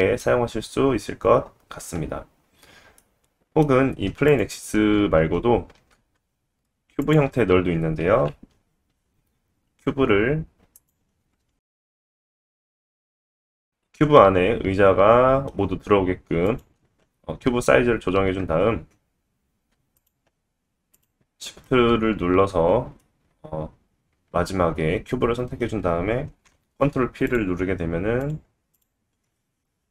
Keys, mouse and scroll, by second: 0.5-0.9 scroll up 2, 3.0 middle click, 3.9 x, 5.7 shift+middle click, 5.8 shift+a, 8.0 KP_3, 8.4 g, 10.3 g, 12.2 s, 13.3 middle click, 16.5 click, 18.4 a, 20.0 shift+click, 20.9 shift+click, 23.2-23.9 middle drag, 26.4 ctrl+p, 27.6-28.2 scroll down 2, 28.2 click, 28.3-28.7 middle drag, 28.7 click, 29.2 g, 29.4-29.9 middle drag.